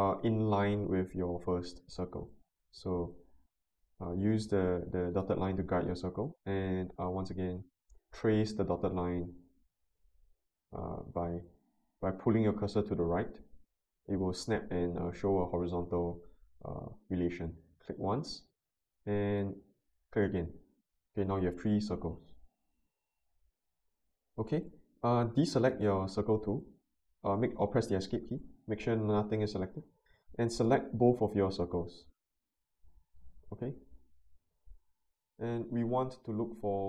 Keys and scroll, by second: 28.2 Escape.